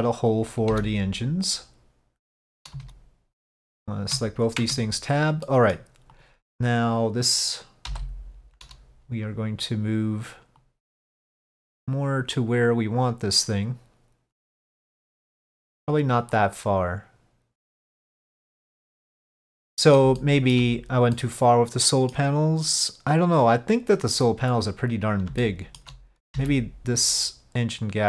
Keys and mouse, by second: 3.6 click, 4.7 Tab, 5.5 middle click, 10.7-12.1 drag, 12.5-15.5 middle drag, 16.5-18.8 drag, 19.2 middle click, 20.3 shift+middle click, 21.3-22.3 middle drag, 25.6 shift+middle click.